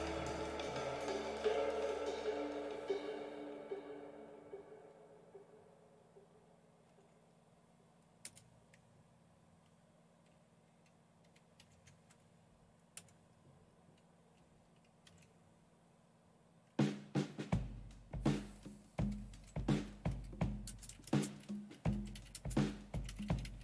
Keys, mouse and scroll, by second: 5.5-6.8 typing, 8.2 Return, 11.7 ctrl+o, 13.0 Return, 15.1 ctrl+x, 19.1 typing, 20.7-23.6 typing.